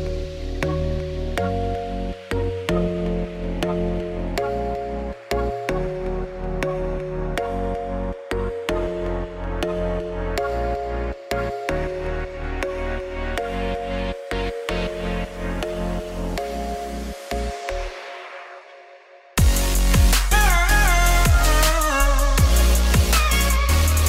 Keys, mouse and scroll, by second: 0.2 scroll up 1, 0.6 scroll down 1, 1.0 click, 1.7 click, 6.6 click, 11.6-14.2 drag, 14.8-16.1 drag, 18.9 scroll up 2, 19.1 click, 19.7 click, 20.5 scroll down 2, 21.3-22.5 drag, 23.5-24.0 scroll up 3.